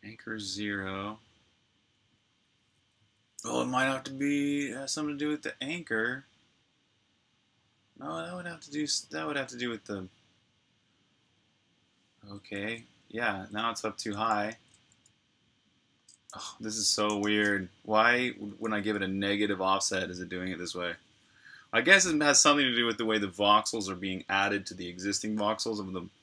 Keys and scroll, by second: 12.3-14.2 typing, 14.4 super+q, 15.9-19.8 typing.